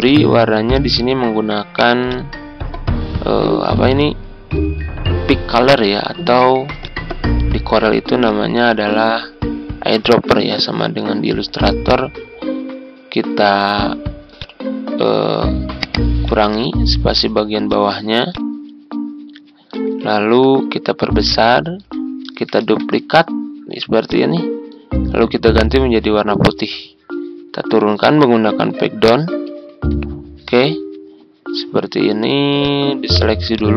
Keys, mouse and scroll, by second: 8.2 ctrl+click, 9.9 click, 20.1 ctrl+scroll up 1, 21.2 ctrl+click, 22.6 ctrl+d, 24.0-27.5 drag, 29.5 ctrl+Page_Down, 30.5 Left, 32.5 click.